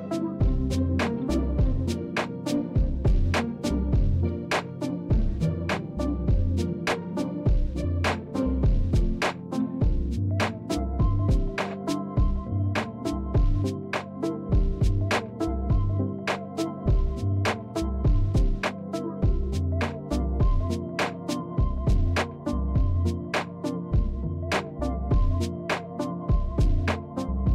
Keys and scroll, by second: 0.7 shift+z, 4.5 Tab, 5.9 Tab, 8.5 shift+z, 9.8 shift+z, 14.1 shift+z, 20.8 a, 22.3 Tab, 23.4 Tab, 24.5 KP_7, 26.4 s.